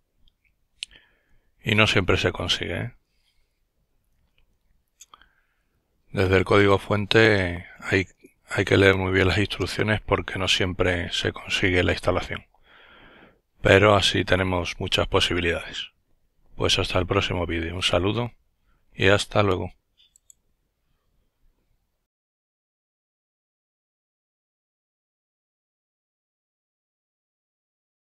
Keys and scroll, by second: 1.8 alt+F4, 4.0 typing, 7.3-8.8 typing, 9.7 Return.